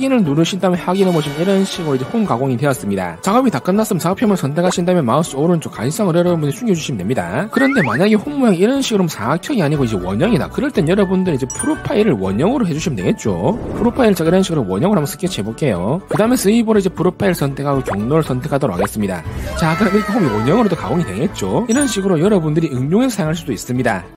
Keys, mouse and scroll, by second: 0.8 click, 5.0 click, 5.5 right click, 7.0 click, 14.1 2, 14.7 click, 15.7 click, 17.6 click, 18.3 click, 19.2 click.